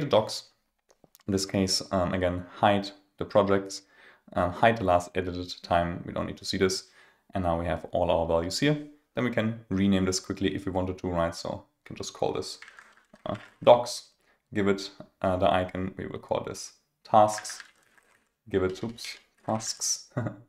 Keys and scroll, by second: 12.6 super+a, 18.9 super+a.